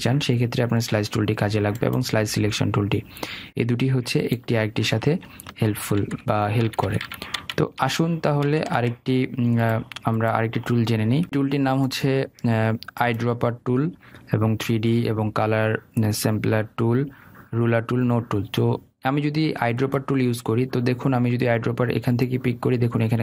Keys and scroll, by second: 6.2 ctrl+alt+z.